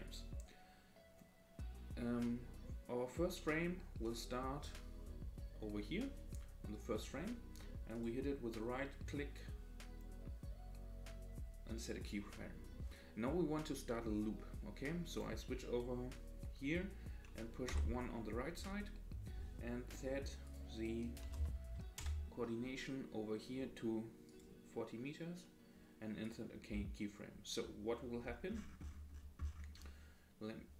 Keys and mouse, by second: 0.1 click, 4.2 right click, 8.1-12.1 right drag, 15.1 click, 17.7 Right, 20.4-22.7 drag, 24.3-26.4 right drag.